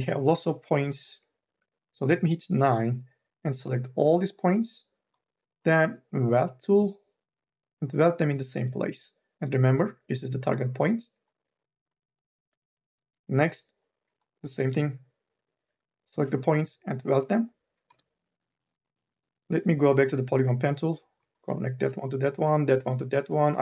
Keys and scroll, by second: 1.7 9, 13.2 9, 15.9 m, 16.3 q, 17.7 space.